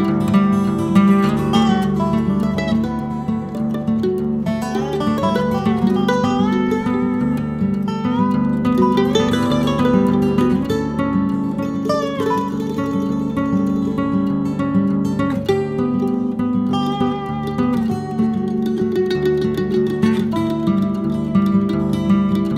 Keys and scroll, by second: 4.6 z, 7.1 g, 11.8 s, 17.7 a, 18.4 Tab, 18.6 Tab, 18.8 KP_1, 20.1 s, 22.1 Tab.